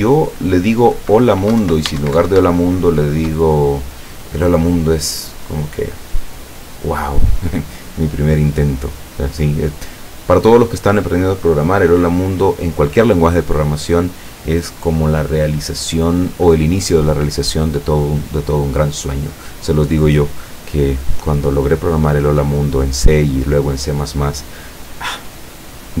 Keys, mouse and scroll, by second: 0.5 click, 1.7 ctrl+Left, 2.0 ctrl+shift+Right.